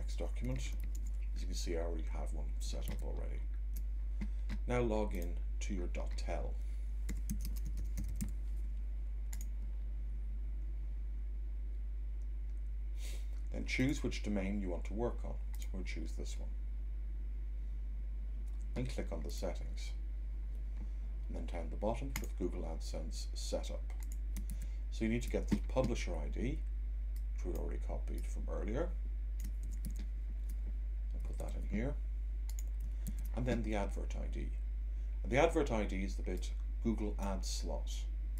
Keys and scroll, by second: 0.8 v, 2.9 super+Tab, 24.5 super+Tab, 29.5 c, 29.8 Tab, 31.4 super+v, 33.0 Tab.